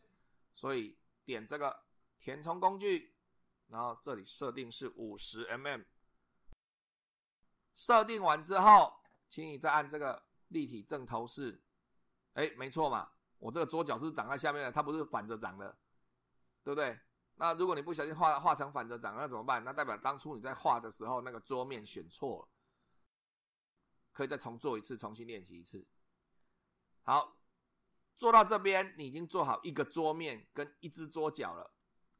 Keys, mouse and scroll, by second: 0.0 2, 3.1 click, 5.0 5, 5.8 0, 7.6 click, 11.5 click, 13.2 click.